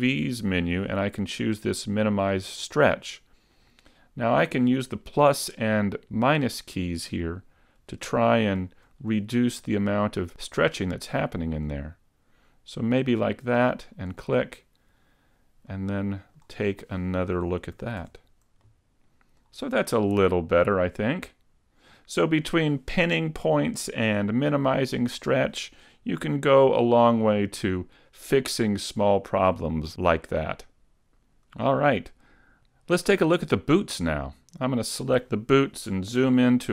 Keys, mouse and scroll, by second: 15.7 middle click, 16.7-17.8 scroll up 2, 17.8 a, 18.0 Tab, 18.7 middle click, 19.7-20.1 scroll down 2, 20.1 middle click, 26.0-27.4 scroll down 4, 27.4 middle click, 27.4 scroll down 1, 31.7 shift+middle click, 33.7 shift+middle click, 34.6 right click.